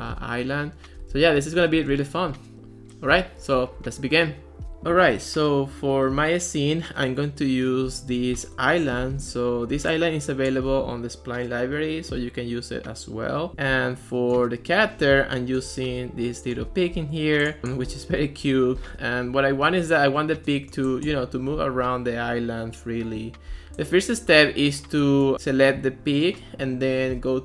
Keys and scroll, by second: 0.2 Left, 0.9-2.5 typing, 3.1 Left.